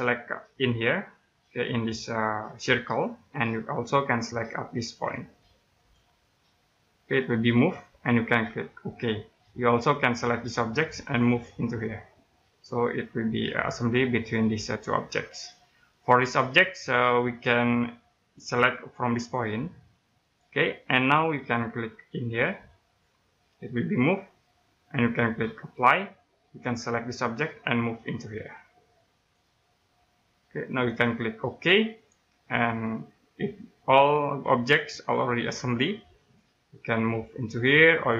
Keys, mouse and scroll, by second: 2.8 click, 3.4-5.6 scroll up 1, 5.8 click, 8.8 click, 15.6 middle click, 20.2 click, 22.8 click, 25.7 click, 29.6 right click, 31.9 click, 33.4 scroll down 1, 33.7 middle click, 36.8 click.